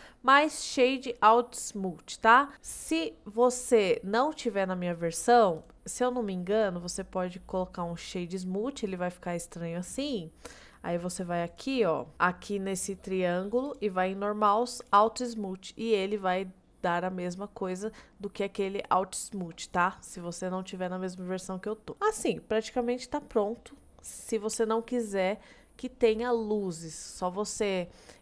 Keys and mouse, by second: 0.3 middle click, 0.8-2.5 right drag, 3.7-4.5 right drag, 5.6-8.1 right drag, 8.6-9.7 middle drag, 13.7 click, 14.8 click, 16.0-16.6 middle drag, 17.1-17.7 middle drag, 18.2-19.6 middle drag, 21.8 middle click.